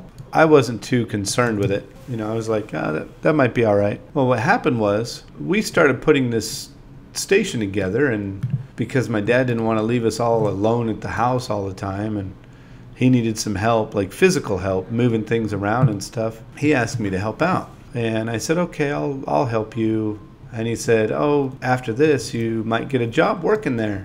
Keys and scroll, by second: 3.9 super+z, 4.2 super+c, 5.5-7.1 typing, 8.8 space, 9.1 space, 10.4 5, 10.6 shift+h, 11.8 super+v, 13.1 3, 13.4 0, 15.1 i, 17.7 9, 21.2 BackSpace.